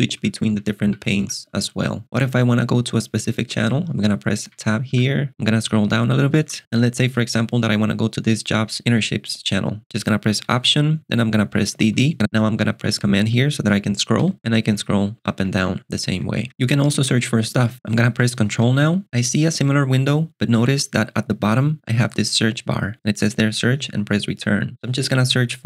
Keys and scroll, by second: 0.1 Tab, 0.8 Tab, 4.4 Tab, 6.4 j, 10.6 alt+super+BackSpace, 11.7 d, 14.3 ctrl+alt+shift+super+6, 14.4 j, 15.5 k, 16.4 k, 18.7 alt+super+space.